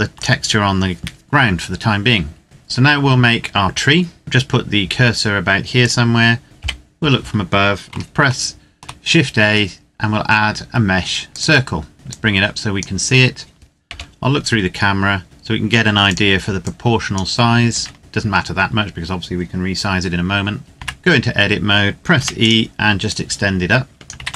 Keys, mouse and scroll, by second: 0.1 click, 2.4 right click, 4.2 click, 5.6 click, 6.4 KP_7, 7.7 shift+a, 11.1 click, 13.7 KP_0, 15.2 s, 15.8 click, 20.6 Tab, 21.0-22.0 scroll up 1, 22.0 e, 22.2 click, 24.0 ctrl+z.